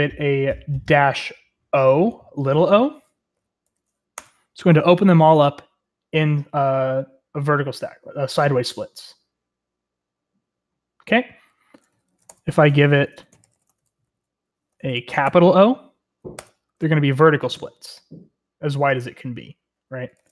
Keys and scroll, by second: 3.4-4.1 typing, 4.1 Return, 12.0-15.2 typing, 14.0 Up, 16.3 Return, 20.2-20.3 typing.